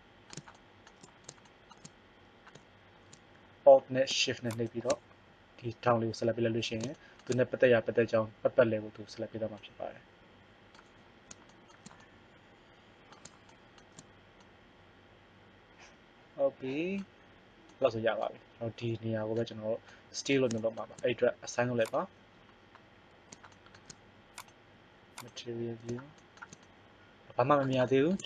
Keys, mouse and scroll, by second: 4.4-7.1 middle drag, 9.8 middle click, 21.7 click, 26.1 right click, 26.9 middle click.